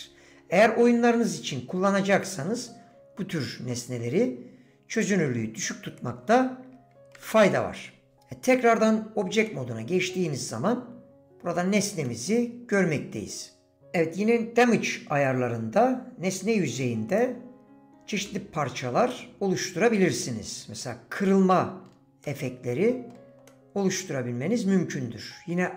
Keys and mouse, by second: 5.4 click, 7.1 middle click, 8.5 Tab, 9.5-11.7 drag, 12.0 drag, 12.7-13.3 drag, 18.3-20.2 drag, 22.2 click, 23.5 click.